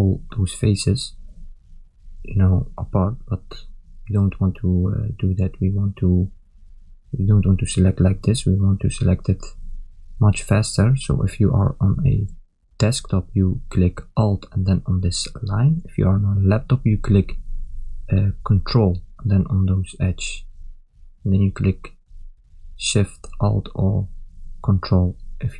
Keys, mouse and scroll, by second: 11.4 middle click, 15.0 ctrl+click, 15.7 ctrl+click, 18.7 ctrl+click, 18.9 shift+click, 19.4 shift+click, 20.2 shift+click, 20.5 shift+click, 21.7 shift+click, 21.9 shift+click, 23.1 shift+click, 23.4 shift+click, 24.3 ctrl+middle click.